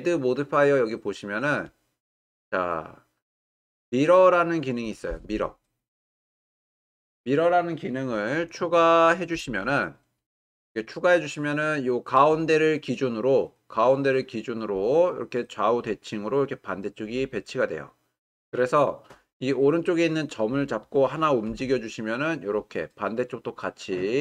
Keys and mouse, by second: 0.2-9.4 drag, 19.4-20.0 drag, 21.5 g.